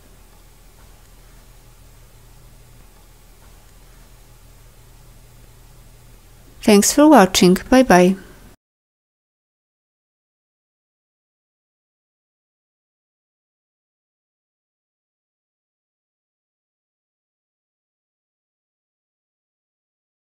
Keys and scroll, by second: 0.7 ctrl+d, 3.6 ctrl+d, 9.3 ctrl+d, 18.6 ctrl+d.